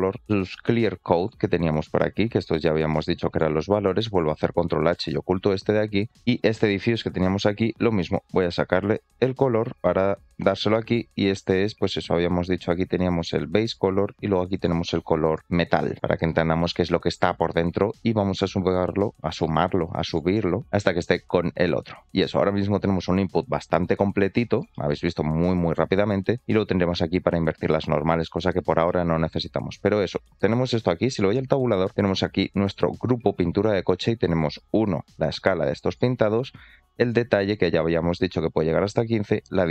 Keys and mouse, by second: 0.3-1.4 drag, 1.9-3.3 drag, 7.9-9.7 drag, 10.7 click, 14.6-16.3 drag, 20.3 click, 24.6 middle click, 28.9 shift+middle click, 32.0 middle click, 34.5-35.9 shift+drag, 36.4-37.4 drag, 38.0 ctrl+z, 39.6-39.7 shift+drag.